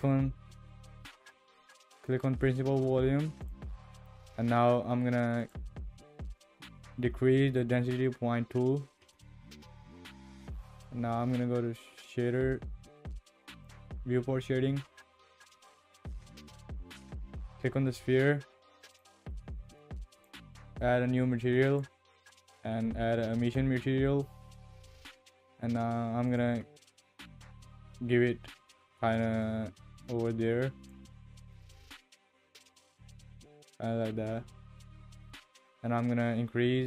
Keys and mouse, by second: 5.4-9.0 drag, 16.3 ctrl+s, 18.9 click, 20.1 click, 21.7-23.5 drag, 26.3 click, 35.3-36.8 drag.